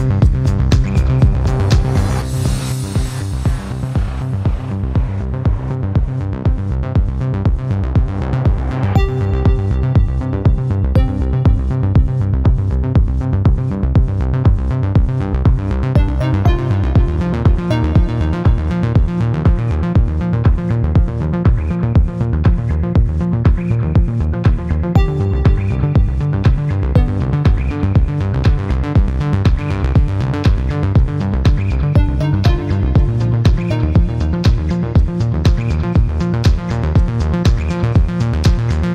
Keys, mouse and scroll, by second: 0.7 click, 2.2 click, 3.3 click, 4.3 click, 5.4 v, 5.7 a, 8.3 click, 9.4-10.9 typing, 13.6 click, 14.2 click, 15.4-15.7 scroll down 2, 17.0-17.4 scroll down 2, 18.5 click, 19.5 click, 21.1 click, 22.0 right click, 24.7 click, 29.5 right click, 30.7 click, 34.5 click, 35.4 click, 37.3 click, 38.7 scroll down 1.